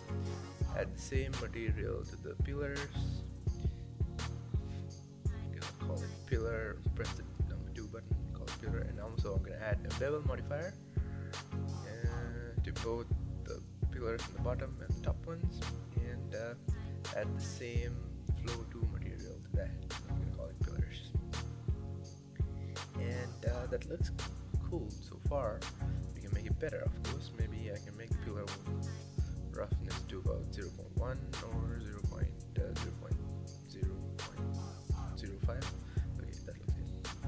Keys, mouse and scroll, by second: 0.0-2.3 drag, 3.3-5.8 drag, 6.1 click, 8.3-9.2 drag, 12.7 click, 14.4-16.3 drag, 17.3-20.0 drag, 20.0 l, 28.1 click, 30.3 click, 31.0 KP_0, 33.5 click, 33.9-34.9 middle drag, 34.9 click, 35.6-35.9 scroll down 2.